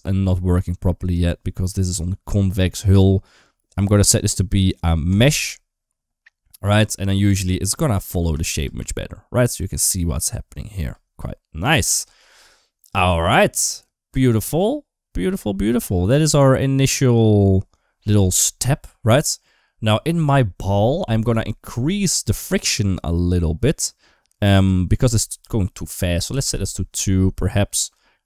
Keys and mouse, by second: 0.9-5.0 drag, 6.5-8.5 typing, 7.6 middle click, 8.7 middle click, 10.7 space, 11.4 click, 13.0 middle click, 15.7 click, 24.4-26.3 drag.